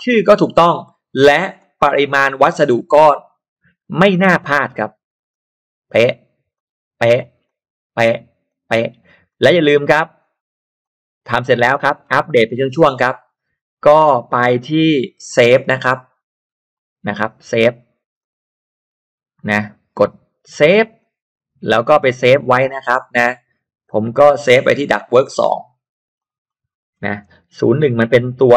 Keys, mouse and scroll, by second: 0.4-0.7 scroll up 1, 1.6 click, 3.1 click, 4.1-4.4 scroll down 1, 5.3 click, 6.5 click, 7.4 click, 8.5 click, 9.3 click, 10.8 click, 11.4 click, 11.7 scroll up 1, 11.9 scroll down 1, 12.2-12.8 scroll up 1, 15.7-16.7 drag, 17.5 click, 18.2 click, 20.9 click, 25.1 click, 26.1 click, 26.5 click, 27.7 0, 28.0 2.